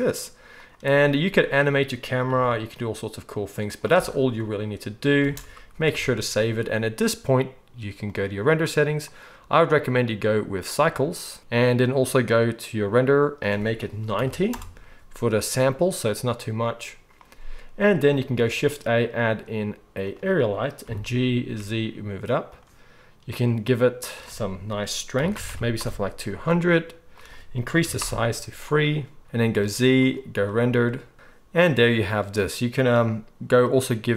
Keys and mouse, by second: 2.3 g, 3.9 space, 5.2 space, 5.8 ctrl+s, 6.0 ctrl+s, 8.0 middle click, 8.1-17.4 right drag, 9.1-17.4 drag, 9.1-18.5 middle drag, 18.3 shift+a, 20.8 g, 22.5-24.1 right drag, 25.4 0, 29.2 ctrl+b, 29.5 z, 31.1-33.8 middle drag, 33.8-34.1 right drag.